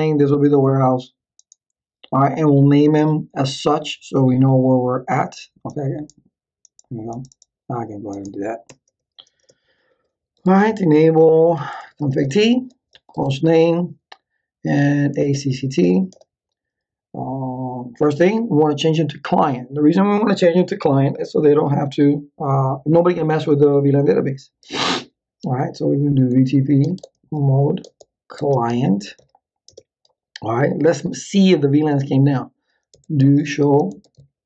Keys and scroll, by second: 8.7 Return, 10.1-12.9 typing, 13.1 Tab, 14.9-16.3 typing, 26.0-29.7 typing, 32.7-34.4 typing.